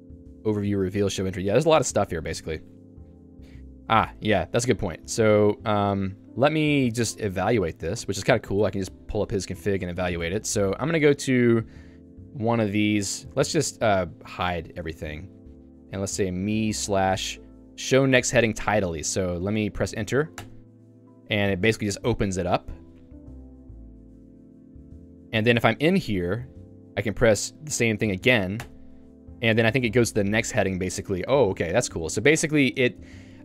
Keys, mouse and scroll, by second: 0.3 h, 0.9 j, 1.8 Escape, 3.2 j, 3.9 k, 4.1 Escape, 4.8-6.3 l, 7.4 a, 8.0 ctrl+e, 8.7 Escape, 10.3 k, 11.7 ctrl+u, 12.3 ctrl+u, 13.4 shift+Tab, 14.3 shift+Tab, 14.9 j, 20.5 Return, 23.1 ctrl+d, 23.6 ctrl+d, 28.9 Return, 30.1 ctrl+u, 31.1 j, 32.7 k.